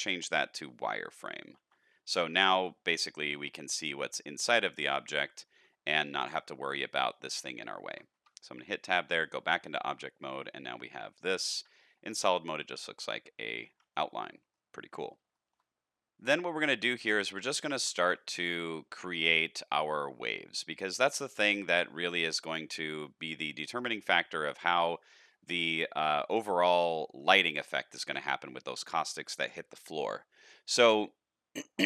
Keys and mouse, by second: 1.6 alt+a, 1.9 shift+middle click, 2.3 middle click, 3.2 shift+middle click, 3.6 middle click, 5.2 shift+middle click, 6.2 middle click, 7.1 middle click, 7.9 Tab, 8.4 shift+middle click, 8.9 middle click, 9.7 shift+middle click, 10.0-10.6 middle drag, 12.5 middle drag, 12.5 z, 13.7 alt+a, 14.5-15.0 middle drag, 15.3 shift+middle drag, 16.2-17.7 middle drag, 17.9 shift+a, 21.9-23.7 middle drag, 25.0 middle click, 26.8-27.2 middle drag, 28.1-28.5 middle drag.